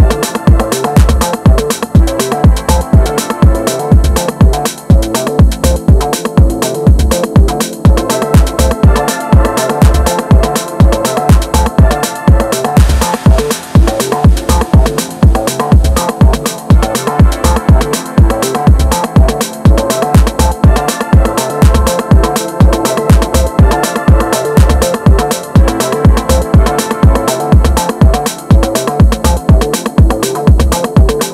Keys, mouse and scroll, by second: 0.4-1.5 scroll up 1, 2.1 scroll up 1, 2.2 click, 4.5 shift+click, 5.1 shift+click, 11.3 KP_7, 13.0 KP_8, 14.5-14.9 scroll down 2, 14.9 KP_6, 15.4 scroll up 1, 15.7-16.5 scroll down 1, 16.5 shift+middle click, 16.9-18.1 scroll up 2, 18.1 r, 20.1 click, 23.3 middle click, 24.1 scroll down 2, 24.3 middle click, 24.8 scroll down 1, 25.1 KP_1, 26.0 scroll down 1, 26.1 shift+middle click, 26.5 scroll down 1, 26.8-29.6 middle drag, 29.6 KP_1.